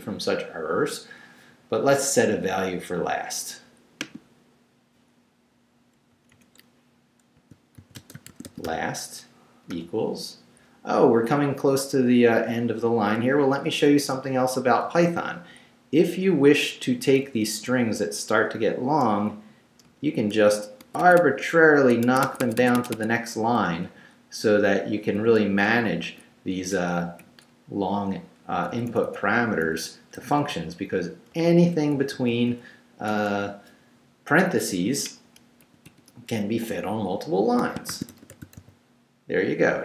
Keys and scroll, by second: 6.1 Right, 7.4-9.7 typing, 11.6 Left, 13.9 Right, 14.8 Left, 17.2 Left, 17.7 Right, 19.8 Return, 20.8 Tab, 23.8 Right, 25.2 Right, 25.7 Return, 26.0 Tab, 26.7 BackSpace, 27.2 Right, 28.6 Right, 30.2 Left, 31.3 Return, 31.9 Right, 35.6 shift+', 36.6 shift+Left, 37.1 Left, 37.7-39.1 typing.